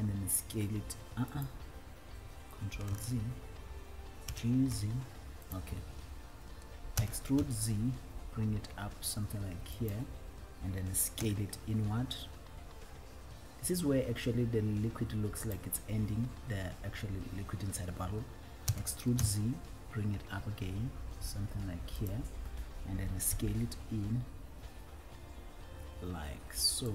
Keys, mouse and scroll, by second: 0.4 s, 1.7 right click, 3.1 ctrl+z, 4.6 g, 5.1 z, 5.9 right click, 7.2 e, 7.8 z, 10.1 click, 15.6 click, 15.6 s, 18.9 e, 19.6 z, 22.4 click.